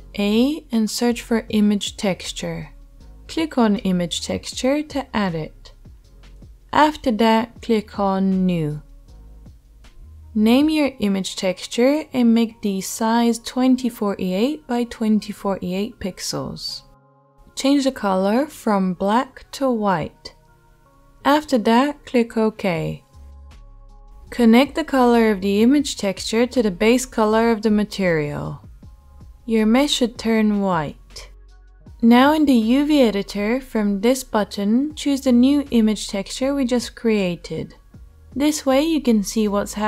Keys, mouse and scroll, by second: 5.8-9.5 middle drag, 9.5-31.9 drag, 11.9 e, 31.7-33.4 middle drag, 33.4-39.8 drag.